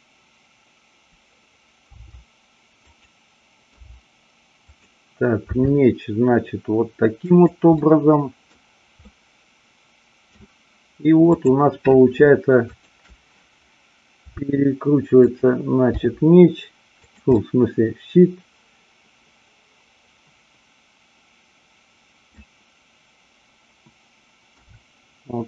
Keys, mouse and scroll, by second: 1.8 r, 3.0 click, 3.8 g, 5.4 r, 7.3 click, 7.7-8.4 middle drag, 9.1-10.3 middle drag, 14.2 r, 15.2 click, 16.0 g, 17.1 click, 17.3-22.3 middle drag, 24.6 r.